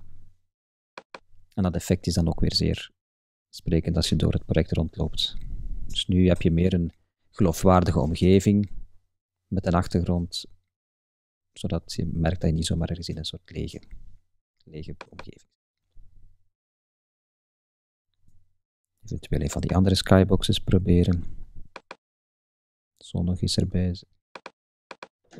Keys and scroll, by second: 3.9 Up, 4.4 Right, 4.7 Up, 5.3 Left, 5.5 Up, 6.4 Left, 6.5 Up, 6.8 Left, 7.0 Up, 7.5 Left, 7.7 Up, 8.4 Left, 9.0 Up, 9.6 Left, 9.9 Up, 10.3 Left, 10.5 Up, 10.9 Left, 13.3 Up, 13.5 Right, 13.7 Up.